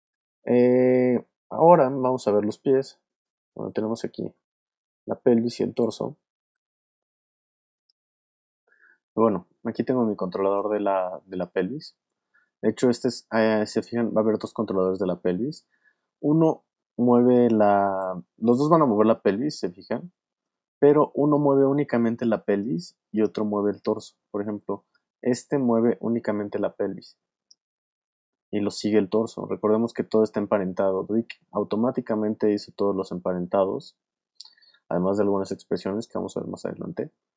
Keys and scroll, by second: 2.1 alt+space, 3.0 space, 5.3 alt+space, 7.1 alt+v, 7.6 v, 17.8 super+z, 20.7 super+z, 24.4 w, 27.7 super+z.